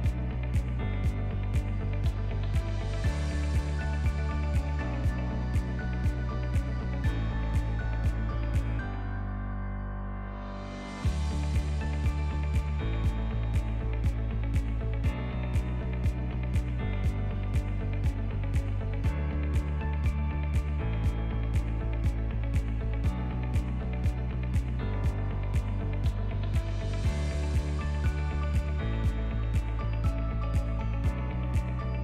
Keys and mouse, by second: 3.7 alt+click, 4.4 ctrl+b, 6.9 Tab, 7.4 ctrl+middle drag, 7.8-8.4 middle drag, 9.4 KP_1, 9.8 Tab, 10.1 alt+right click, 10.9 alt+z, 11.8-13.6 drag, 14.4-16.1 drag, 16.1 Tab, 16.5 alt+z, 16.8-17.3 middle drag, 17.6 ctrl+middle click, 18.0-18.6 right drag, 18.8 right drag, 19.5 g, 21.4 ctrl+s, 27.2-27.6 shift+middle drag, 27.9-29.6 middle drag, 30.0 shift+middle click, 30.4 ctrl+middle click, 30.6 ctrl+click.